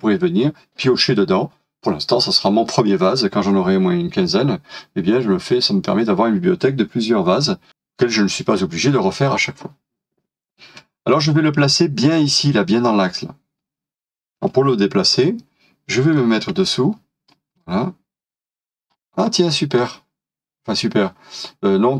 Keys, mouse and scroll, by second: 15.3-16.1 scroll down 1, 16.1 middle click, 17.5 middle click, 17.7-18.9 scroll up 1, 19.8 middle click.